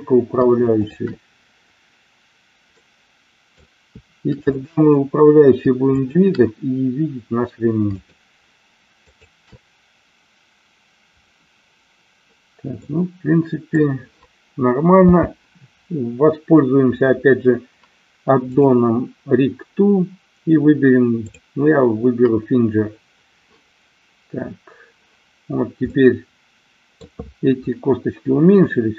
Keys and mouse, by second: 0.7-2.1 shift+drag, 2.8-3.7 middle drag, 5.9-7.2 shift+drag, 8.1-9.4 shift+drag, 12.9-13.9 middle drag, 15.1 n, 21.2 click, 25.9-27.2 middle drag.